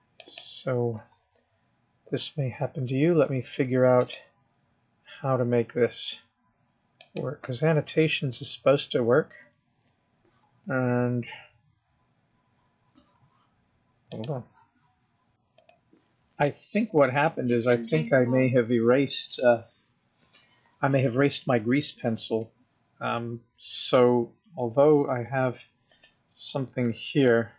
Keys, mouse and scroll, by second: 0.6 click, 4.4 click, 26.2 click, 27.1 x.